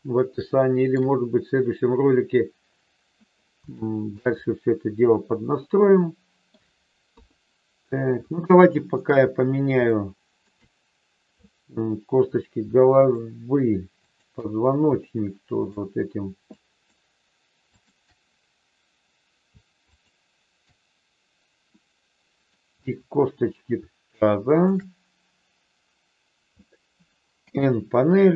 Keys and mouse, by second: 0.3 shift+middle click, 3.7 shift+middle click, 5.6 middle click, 7.0 KP_3, 8.2 shift+middle click, 10.0 shift+middle click, 12.9-14.6 shift+drag, 15.0 shift+middle click, 16.5 shift+click, 17.6-19.0 shift+drag, 19.9-21.2 shift+drag, 21.6 middle click, 22.7 middle click, 24.5-25.7 shift+drag, 27.5 n.